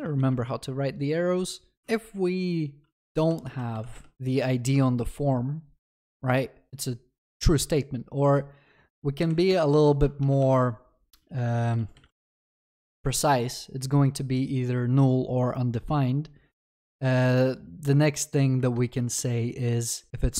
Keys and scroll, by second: 4.1 ctrl+s, 12.4 Return.